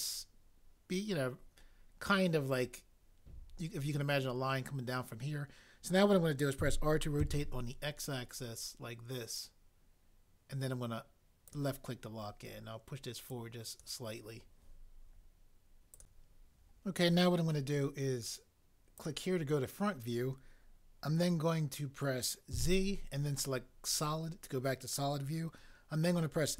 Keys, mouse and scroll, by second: 6.6 r, 7.2 x, 22.5 z.